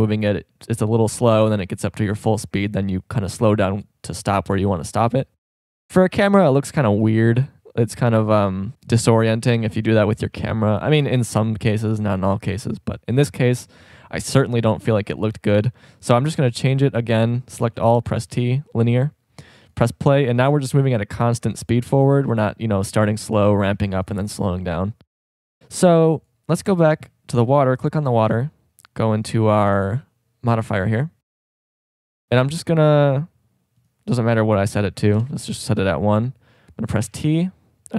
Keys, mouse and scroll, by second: 16.5 a, 16.7 a, 18.4 t, 37.0 t.